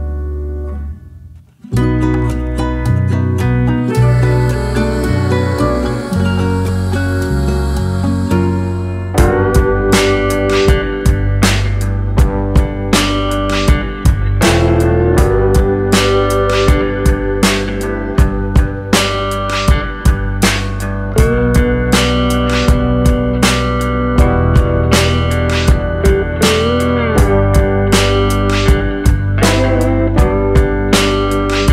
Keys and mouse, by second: 0.7 shift+middle click, 1.1 shift+middle click, 1.7 middle click, 2.2 shift+middle click, 2.8 middle click, 3.3 shift+middle click, 4.6 KP_3, 5.4 middle click, 6.0 shift+middle click, 6.6 shift+middle click, 7.2 shift+middle click, 8.4 k, 16.3 shift+middle click, 16.7 shift+middle click, 17.0 shift+middle click, 17.9 k, 27.4 shift+middle click, 28.1 shift+middle click, 29.1 k.